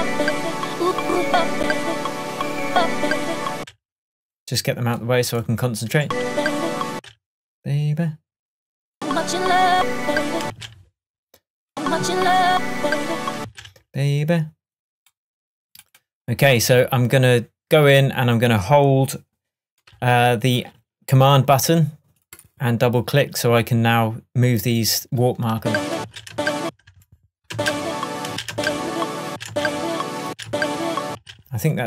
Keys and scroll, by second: 3.6 space, 6.1 space, 10.5 space, 13.4 space, 25.6 space.